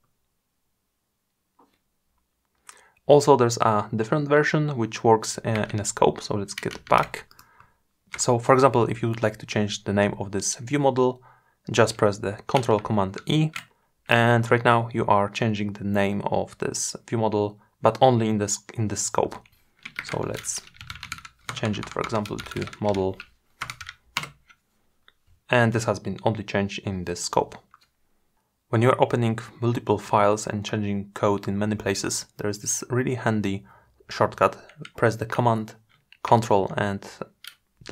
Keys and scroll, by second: 12.1 ctrl+super+e, 34.7 ctrl+super+Left.